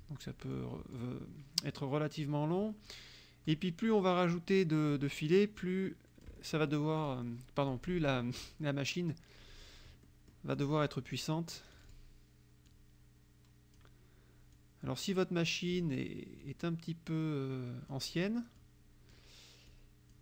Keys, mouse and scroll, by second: 0.6 click, 1.7 click, 3.0 click, 5.0-6.5 drag, 7.1 click, 7.7 click, 9.5 click, 10.1 click, 11.8 click, 12.7-14.0 drag, 14.6-16.0 drag, 16.5-18.2 drag, 18.7 click, 19.8 click.